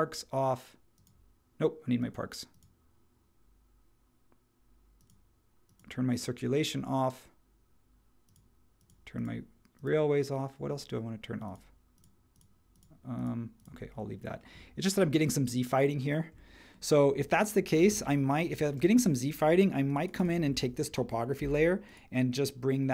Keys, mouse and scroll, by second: 17.7 space, 18.8 space, 21.4 m.